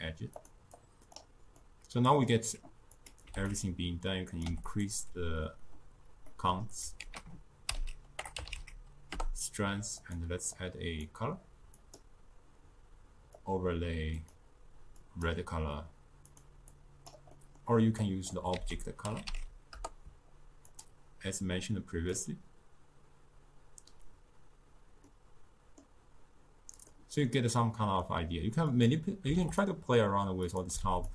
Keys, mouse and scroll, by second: 0.4 click, 0.8-1.6 drag, 1.6-3.0 middle drag, 3.0 click, 4.3 click, 6.3 middle click, 7.1 ctrl+a, 10.6-14.3 drag, 16.8 click, 17.4-18.1 middle drag, 18.1 click, 18.6 ctrl+a, 21.4-24.4 drag, 25.1-28.8 middle drag, 28.8 click, 30.5 click.